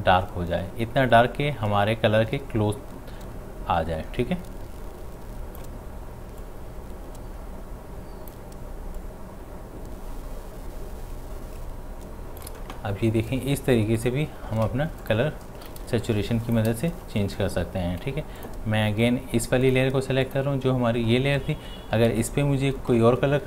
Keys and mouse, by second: 14.6 space, 18.5 click.